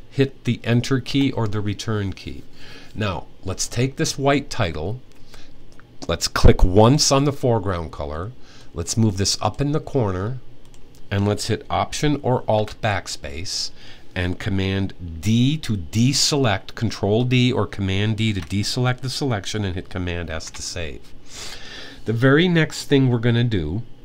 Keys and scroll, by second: 17.8 d, 20.1 super+s.